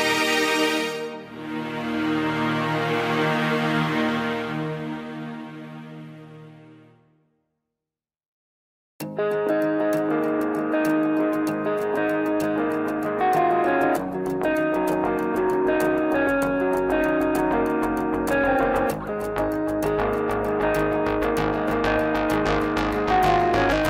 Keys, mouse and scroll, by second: 0.9-1.4 scroll up 1, 1.4 ctrl+i, 1.8 x, 3.8 KP_Divide, 4.6 KP_1, 5.2 shift+middle click, 5.4-6.0 scroll up 1, 6.0 2, 6.5 click, 7.0 shift+click, 7.5 shift+click, 8.0 shift+click, 8.4 shift+click, 8.5 shift+click, 8.9 shift+click, 9.7 f, 11.0 v, 11.8-12.3 scroll up 1, 12.3 ctrl+z, 12.5 ctrl+z, 13.6 shift+click, 14.9 v, 16.5 a, 17.3 g, 19.5-19.9 scroll down 2, 19.9 middle click, 20.8-21.4 scroll up 1, 22.2-23.6 drag.